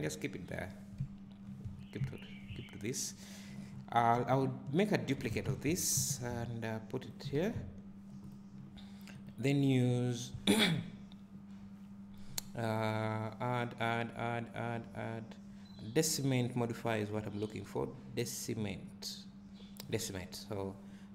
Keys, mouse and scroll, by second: 0.0-7.4 drag, 0.7 scroll down 1, 1.0 `, 1.7-2.0 scroll up 1, 2.0 `, 3.7-5.2 scroll down 1, 5.2 shift+d, 7.4 alt+a, 7.5 scroll up 1, 8.3 click, 20.2-21.1 drag.